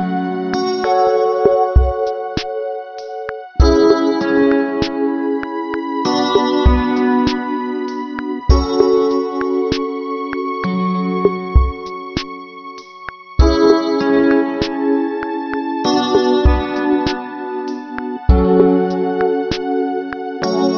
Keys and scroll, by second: 7.4 ctrl+-, 8.4 ctrl+=, 14.1 ctrl+-, 16.7 ctrl+-, 17.5 ctrl+=.